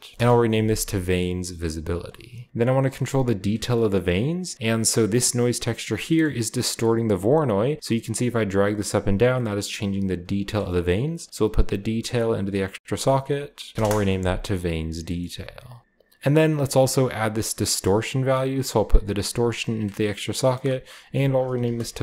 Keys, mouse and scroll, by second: 0.0-0.6 typing, 1.0 middle click, 1.9-3.7 drag, 2.5-3.7 right drag, 3.7-5.5 shift+middle drag, 3.9-5.5 shift+scroll up 1, 5.5 click, 5.9 scroll down 2, 6.0-7.4 middle drag, 6.8 scroll up 2, 7.4-10.5 drag, 10.4 right click, 10.6 middle click, 11.3-11.9 drag, 12.5 click, 12.7 click, 13.1 click, 13.3 click, 13.5 click, 13.7 Return, 13.7 typing, 14.7-16.3 scroll down 1, 14.7-16.2 typing, 15.0 middle click, 15.6 drag, 15.8-16.7 right drag, 16.3-17.3 scroll up 1, 17.3 click, 17.3-18.0 scroll up 1, 18.0 middle click, 18.0 scroll up 1, 18.7-19.7 drag, 20.2 click, 20.4 click, 20.9 click, 21.5-22.0 typing.